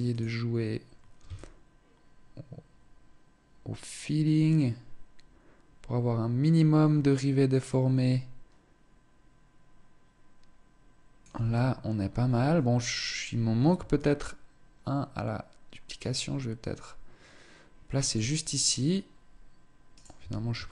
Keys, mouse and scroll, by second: 0.9 shift+click, 13.5 shift+click, 19.5 right click, 19.8 Tab, 20.1 Tab, 20.4 right click.